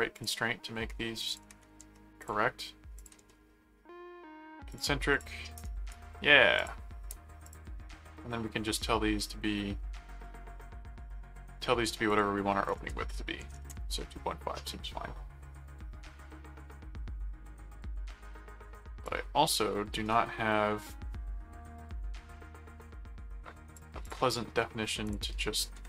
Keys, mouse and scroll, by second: 0.1 click, 1.3 click, 2.2 ctrl+click, 3.0 ctrl+click, 4.7 click, 5.6 right click, 6.6 click, 7.4 click, 12.0 click, 19.0-23.7 drag, 24.0 click, 25.0 click.